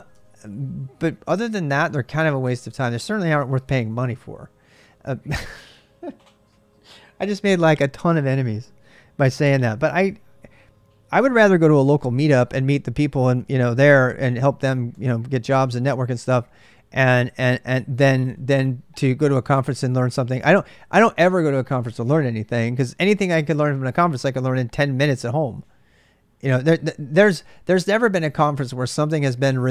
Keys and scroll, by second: 0.0 ctrl+[, 0.0-4.0 typing.